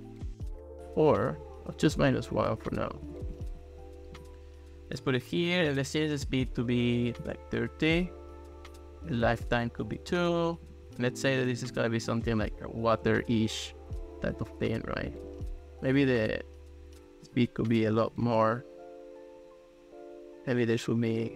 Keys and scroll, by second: 1.0 Return, 2.4 -, 2.7 1, 3.1 Return, 6.8-7.6 typing, 9.6 2, 9.9 Return, 17.7-18.5 typing.